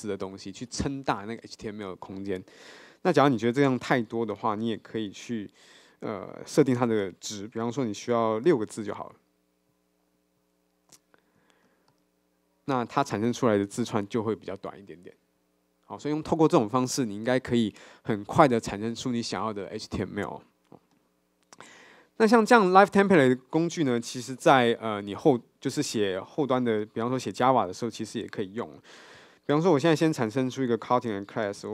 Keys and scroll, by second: 3.9 super+z, 8.5 super+k, 9.8 Escape, 11.9 Escape, 12.1 Tab, 24.0 super+1, 29.4 super+n, 30.6 super+n.